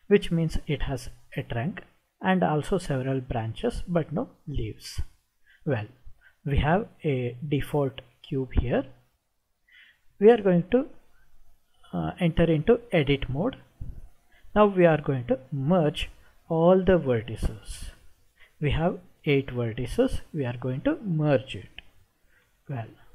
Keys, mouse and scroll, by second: 7.5 click, 13.2 Tab, 22.5 m.